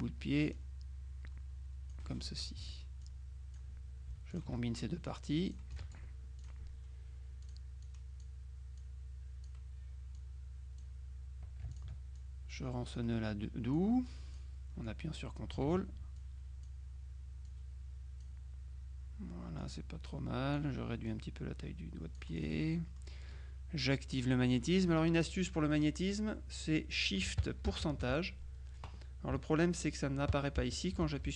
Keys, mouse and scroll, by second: 0.5-2.5 drag, 2.7 F2, 3.1 click, 4.4 shift+click, 5.1 click, 7.5 click, 8.9 click, 10.3 click, 11.8 ctrl+click, 13.9-16.1 drag, 15.7 ctrl+z, 16.3 ctrl+click, 17.5 click, 19.7-21.1 drag, 22.8 click.